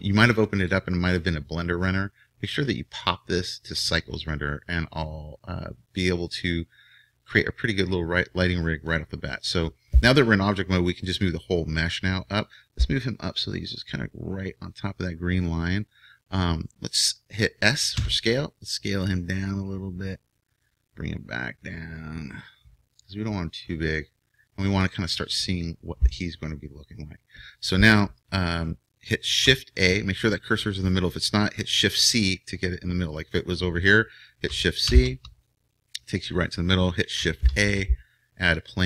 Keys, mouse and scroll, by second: 0.6-2.4 drag, 6.2-8.1 middle drag, 11.1-12.8 drag, 18.0 s, 21.7-23.4 drag, 33.1-34.8 drag, 34.8 shift+c, 37.4 shift+a.